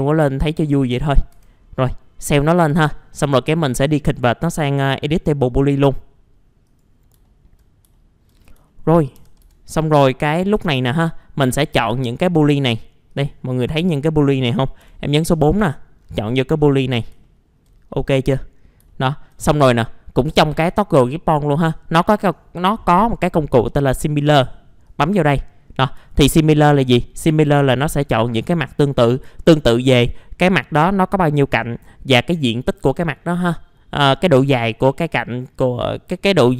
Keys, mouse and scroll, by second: 0.3 alt+middle click, 1.3 F4, 1.6-2.6 scroll up 1, 2.6 F4, 2.8-3.5 scroll down 1, 3.5 middle click, 5.4 right click, 6.6 click, 7.2 alt+middle click, 7.9 alt+middle click, 8.4 scroll up 1, 8.7 alt+middle click, 9.1 typing, 10.6 alt+middle click, 11.1-11.9 scroll up 1, 11.9 F4, 12.1 scroll up 1, 13.1 click, 14.8 4, 15.5 click, 16.0-16.9 scroll down 1, 16.9 scroll up 1, 17.2 alt+middle click, 17.9-18.5 scroll up 1, 18.5 scroll down 1, 18.9 alt+middle click, 22.0 click, 25.6-26.0 scroll down 1, 26.1-27.6 alt+middle drag, 28.9 scroll down 1, 29.3 alt+middle click, 30.3 scroll up 1.